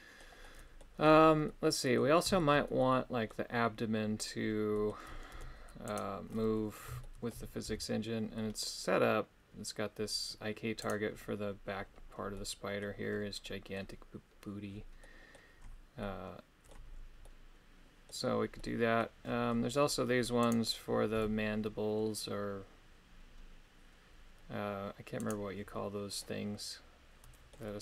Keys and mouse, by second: 0.4 middle click, 1.4 middle click, 2.4 shift+middle click, 2.8 middle click, 4.7 middle click, 5.4 Tab, 5.9 right click, 6.4 middle click, 7.1 shift+middle click, 7.8 g, 12.3 middle click, 13.5 middle click, 15.0 middle click, 16.0 middle click, 17.2 middle click, 18.6 middle click, 20.6 right click, 21.4 g, 25.2 right click, 26.2-27.7 middle drag.